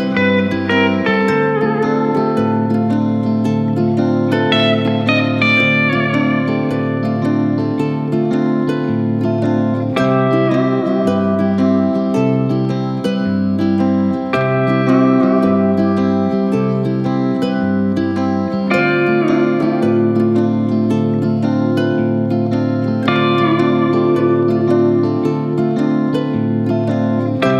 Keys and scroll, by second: 0.6 Return, 2.2 Return.